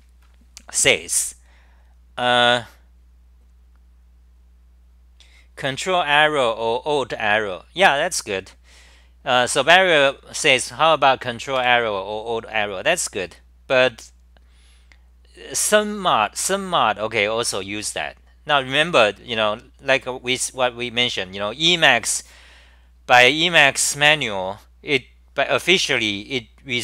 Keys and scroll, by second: 12.1 scroll down 5.